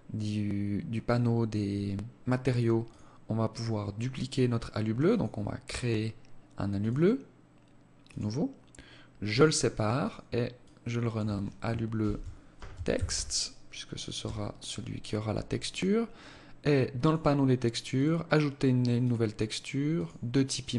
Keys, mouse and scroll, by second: 2.0 click, 4.2 click, 5.9 click, 8.4 click, 9.2 click, 16.2 click, 17.1 click, 18.2 click, 19.8 scroll down 4, 20.4 click.